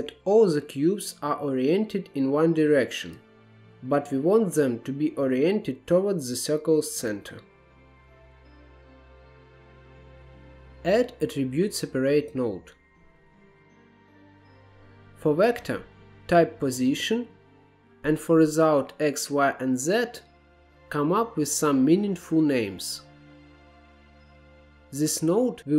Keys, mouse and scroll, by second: 0.8-2.3 scroll up 1, 4.0 Tab, 4.9 click, 6.9-7.3 scroll down 2, 7.3-7.6 middle drag, 8.0-8.4 middle drag, 8.5 KP_7, 8.7 scroll up 2, 9.3-9.7 drag, 9.7 g, 10.0 click, 10.4 shift+a, 14.1-17.2 drag, 19.2-23.1 drag, 23.1-23.8 scroll up 3, 23.8-25.7 drag.